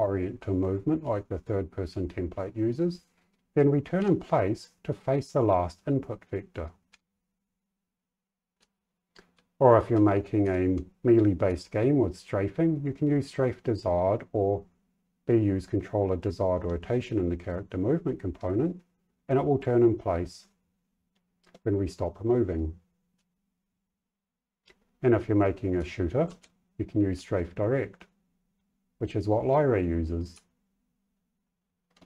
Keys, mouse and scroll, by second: 3.9 s, 6.8 w, 8.5 w, 9.3 d, 9.9 a, 10.4 s, 11.4 w, 23.1 w, 25.5-26.8 typing, 30.3 w.